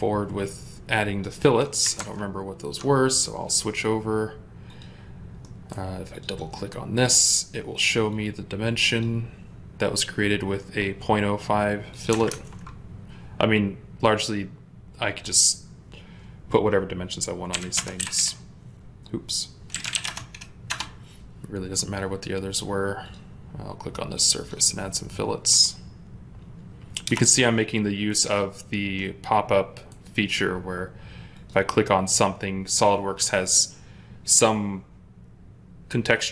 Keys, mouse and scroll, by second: 0.8 ctrl+click, 1.8 ctrl+Tab, 5.3 middle click, 6.2 double click, 12.2 ctrl+Tab, 17.4-18.1 typing, 18.0 Return, 19.6-19.9 typing, 19.9 Return, 20.6 Return, 26.9 Return, 28.8 middle click.